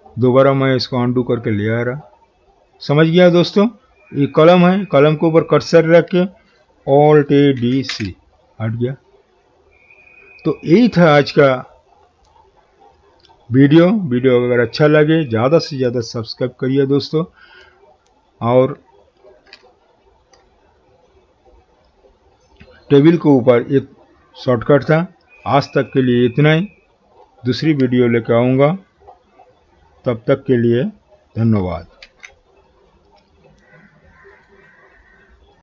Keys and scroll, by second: 7.2 alt+a, 7.6 alt+d, 7.9 alt+c, 32.0 alt+z.